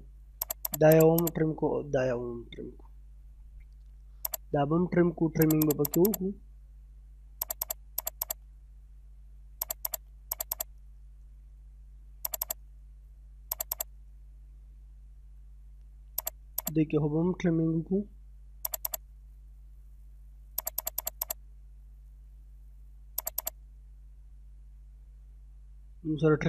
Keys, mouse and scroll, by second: 0.4 click, 2.1 middle click, 2.5 scroll down 1, 2.9 middle click, 4.3 click, 4.8-5.3 scroll up 1, 5.4 click, 6.4 scroll down 1, 6.7 middle click, 7.1-7.4 scroll up 1, 7.4 click, 8.5 scroll down 1, 8.8 middle click, 9.3 scroll up 1, 9.6 click, 10.8-11.1 scroll down 1, 11.1 middle click, 11.6-12.0 scroll up 1, 12.3 click, 12.8-13.1 scroll down 1, 13.5 click, 14.1 scroll down 1, 14.6 middle click, 15.2-15.5 scroll up 1, 16.2 click, 16.9 scroll down 1, 17.3 middle click, 18.0-18.6 scroll up 1, 18.7 click, 19.2 scroll down 1, 19.4 middle click, 19.9 scroll up 1, 20.6 click, 21.6 scroll down 1, 22.1 middle click, 22.6-22.9 scroll up 1, 23.2 click, 23.7-24.0 scroll down 1, 24.8 middle click.